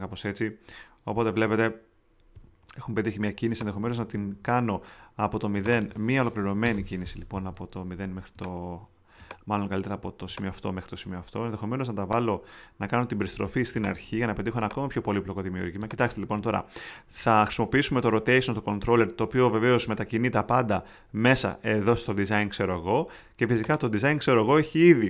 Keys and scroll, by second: 3.9 shift+super+z, 4.6 super+z, 6.4 i, 6.6 Home.